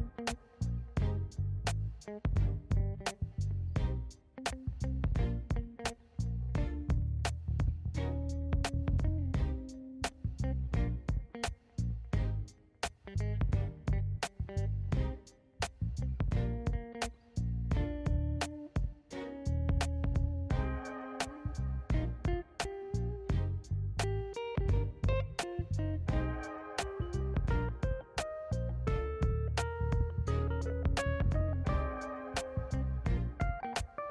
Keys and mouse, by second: 0.8 click, 1.1-3.1 drag, 4.4 click, 6.6 click, 7.9-9.6 drag, 15.1 right click, 15.2 click, 16.7 click, 17.4-18.5 drag, 21.2 Tab, 22.2 2, 23.0 alt+shift+click, 23.8 click, 25.0 shift+middle click, 26.4 middle click, 27.7 alt+shift+click, 28.6 alt+shift+click, 30.2 alt+shift+click, 32.7 alt+shift+click, 33.5 alt+shift+click.